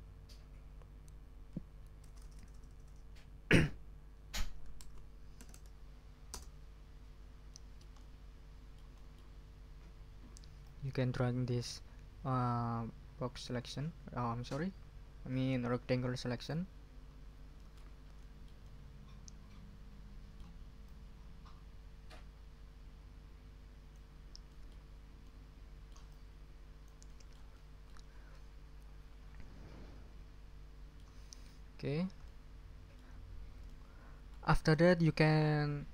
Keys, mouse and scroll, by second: 2.0 BackSpace, 4.4-6.0 typing, 6.3 Return, 7.5-9.3 middle drag, 9.4 ctrl+scroll down 2, 10.6-16.7 drag, 16.9-17.4 ctrl+scroll up 2, 17.6 ctrl+middle click, 17.9 ctrl+scroll down 2, 18.2-20.6 ctrl+middle drag, 20.8-24.1 drag, 24.4 ctrl+click, 24.9-25.3 ctrl+scroll up 2, 25.1 ctrl+click, 25.3 middle click, 25.4-27.0 drag, 27.2 click, 27.7 click, 28.3 click, 28.8 middle click, 29.2 click, 29.7-31.2 middle drag, 31.7 ctrl+scroll down 2, 32.2 ctrl+middle click, 33.3 ctrl+scroll up 2, 33.7 ctrl+middle click, 34.7 middle click, 34.9-35.2 scroll up 1.